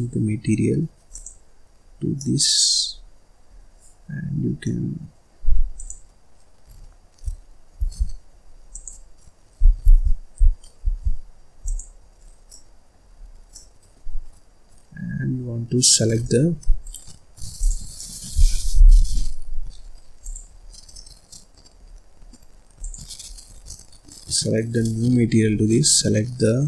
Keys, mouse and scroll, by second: 0.0-1.3 drag, 1.8-2.1 scroll up 1, 2.1 middle click, 2.9 scroll up 1, 4.6-5.7 middle drag, 5.7 click, 7.8 ctrl+z, 8.7 click, 9.9 ctrl+z, 10.8 ctrl+z, 11.6 click, 12.1-12.5 scroll up 4, 12.5 middle click, 13.2 scroll up 1, 13.5-16.8 middle drag, 16.8 right click, 17.5 click, 17.9 middle click, 18.7 Escape, 18.9 scroll up 3, 19.1-20.7 middle drag, 20.7 click, 20.8 scroll up 5, 20.9 scroll down 1, 21.0 middle click, 21.8-22.8 scroll up 5, 22.8 click, 23.3-23.6 scroll up 2, 23.6-24.8 middle drag, 24.8-25.6 scroll up 6, 25.6 click.